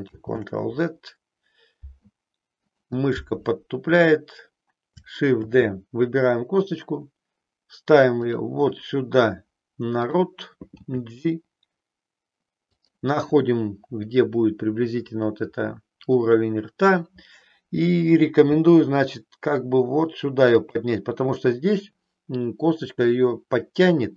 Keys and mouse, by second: 0.0 ctrl+z, 2.7 click, 5.3 shift+d, 8.4 click, 9.9 click, 10.9 g, 18.4 g, 20.7 click.